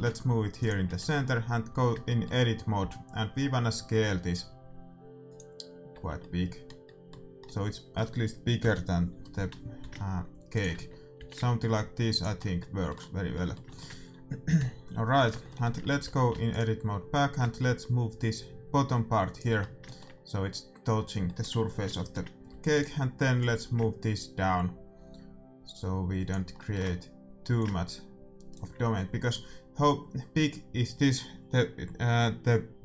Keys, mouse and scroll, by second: 0.9 Tab, 1.2-3.7 middle drag, 2.7 s, 5.8-7.9 middle drag, 5.8 z, 9.7 s, 10.7 Tab, 11.1 g, 12.3 middle click, 15.8 Tab, 16.2 a, 16.4-18.3 right drag, 17.1-19.0 drag, 19.7-22.7 middle drag, 22.4 a, 22.7-24.5 right drag, 23.3-25.6 drag, 26.5-28.5 middle drag, 27.5-29.5 drag.